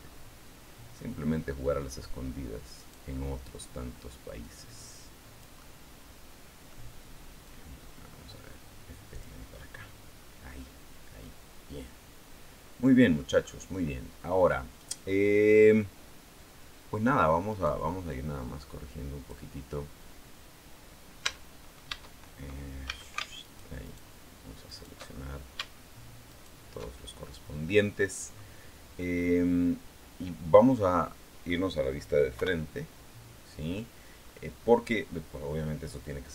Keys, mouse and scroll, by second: 2.5 right click, 4.2-6.7 drag, 7.2-9.2 drag, 9.2-10.3 scroll down 3, 10.3-13.1 middle drag, 15.5-16.1 scroll up 2, 16.1-17.3 scroll down 2, 17.3 right click, 17.9-19.3 drag, 21.0 Tab, 22.7 a, 23.2 alt+shift+right click, 23.6 alt+shift+right click, 24.5 alt+shift+right click, 26.1 alt+shift+right click, 26.7-27.3 alt+shift+scroll down 1, 30.3-31.4 right drag, 32.1 KP_1, 33.3-34.0 scroll down 2, 34.2-34.6 scroll up 2.